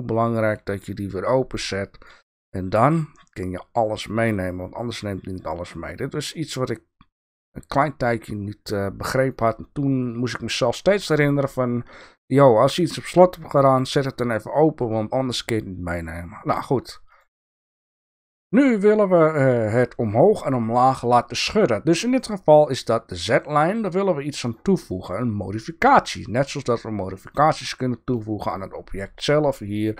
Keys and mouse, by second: 0.4 click, 1.8 click, 3.0-6.2 drag, 9.3 click, 13.5 click, 28.1-29.5 drag.